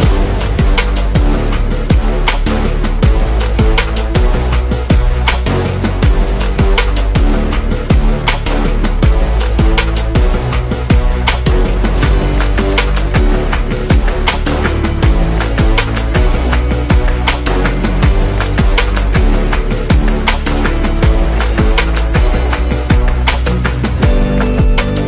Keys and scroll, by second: 0.0-0.2 typing, 1.5 v, 5.1 r, 7.4-10.0 typing, 10.6 super+0, 12.2 z, 13.7-15.7 typing, 23.5-24.4 typing.